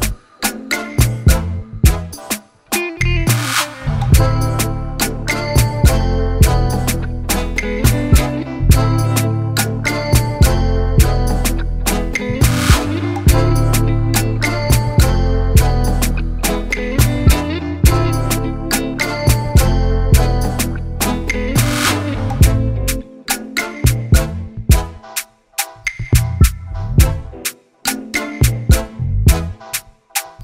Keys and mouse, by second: 0.0 ctrl+j, 1.2 ctrl+t, 1.8 right click, 2.5 click, 3.3 click, 6.5 Return, 7.1 ctrl+j, 7.6 ctrl+t, 8.2-9.3 drag, 9.4 right click, 10.2 click, 11.2 click, 12.9 click, 14.0 click, 15.6 Return, 17.0 click, 17.8 click, 18.9 click, 22.8 shift+click, 24.9 click, 25.9 click, 26.7-29.0 typing.